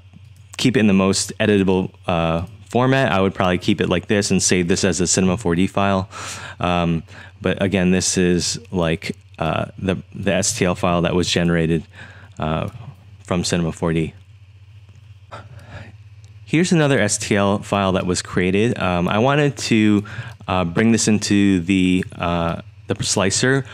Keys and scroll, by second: 10.7 super+z, 11.3-12.4 typing, 14.0 typing, 15.5-23.7 typing.